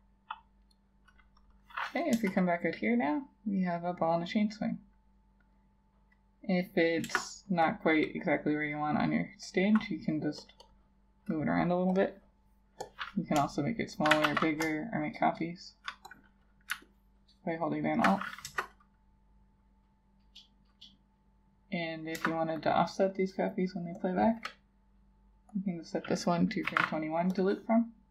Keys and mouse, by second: 2.2 Return, 7.1 Return, 10.7 double click, 13.7 shift+click, 14.3 ctrl+z, 15.1 shift+click, 16.9 alt+click, 18.5 Return, 22.2 Return, 26.7 2, 26.8 1.